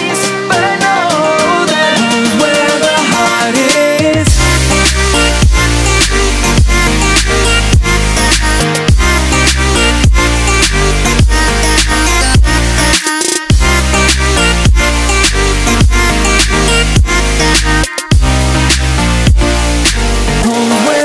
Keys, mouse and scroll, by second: 0.1 click, 0.7 click, 2.1 click, 3.9 right click, 6.4 click, 10.6 click, 12.2 right click, 13.3 x, 15.3 right click, 15.9 right click, 17.9 click, 18.9 Tab.